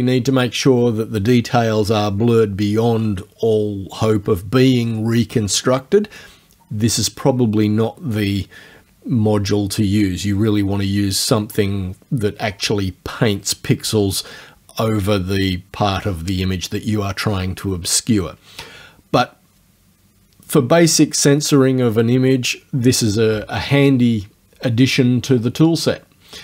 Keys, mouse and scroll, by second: 25.9 click.